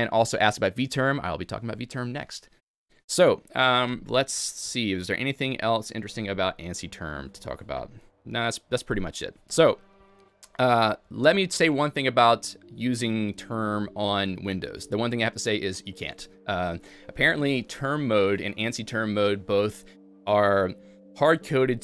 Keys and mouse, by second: 5.6 click, 5.8 click.